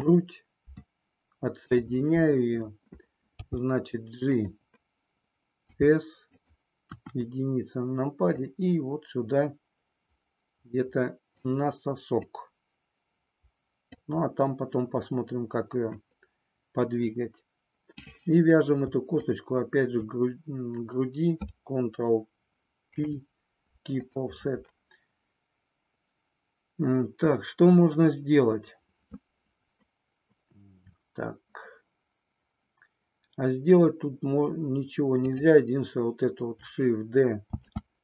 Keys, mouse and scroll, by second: 3.4 g, 5.8 s, 6.9 KP_1, 8.4-11.4 drag, 12.3-13.9 drag, 19.2 shift+click, 22.9 ctrl+p, 35.3 click, 37.5 shift+d.